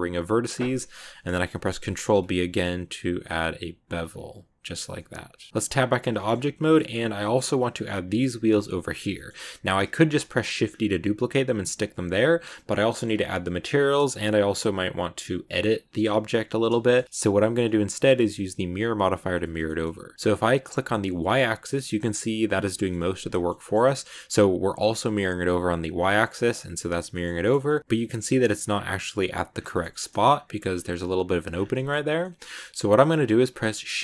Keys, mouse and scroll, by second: 0.2-1.0 scroll up 1, 1.0 middle click, 1.8 ctrl+b, 4.7 scroll down 1, 4.9 middle click, 5.5-6.1 scroll up 3, 6.1 shift+middle click, 6.2 scroll down 2, 6.5-8.0 middle drag, 8.0 right click, 8.9 scroll down 1, 9.0 middle click, 9.8 shift+d, 12.0 x, 12.4 right click, 12.8 middle click, 12.9 scroll up 2, 15.1 scroll up 1, 16.7-18.0 shift+middle drag, 19.4-20.5 shift+middle drag, 20.5 click, 21.5 click, 22.0 click, 22.6 scroll down 1, 22.7 shift+middle click, 23.4 scroll up 1, 23.5 shift+middle click, 24.2 click, 25.7 click, 26.1-27.4 middle drag, 27.4-28.4 shift+scroll up 4, 27.5 middle click, 29.4 scroll down 1, 29.6 shift+middle click, 30.2-30.8 scroll up 4, 30.5 shift+middle click, 31.4 scroll down 5, 31.6-32.6 shift+middle drag, 32.6 scroll down 1, 33.5 scroll down 3, 33.6 shift+c, 33.9-34.0 middle drag.